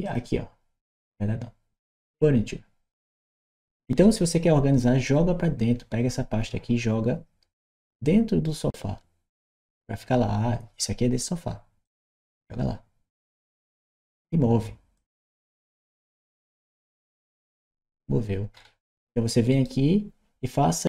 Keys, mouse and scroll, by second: 1.8 click, 11.7-13.3 drag, 14.8 click, 19.3 right click.